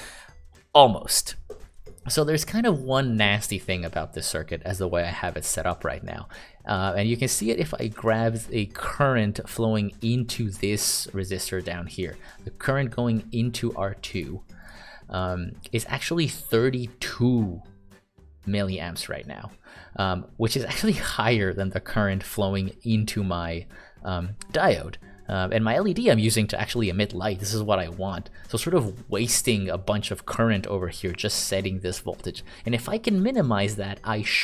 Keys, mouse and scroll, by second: 8.4 click, 11.3 click.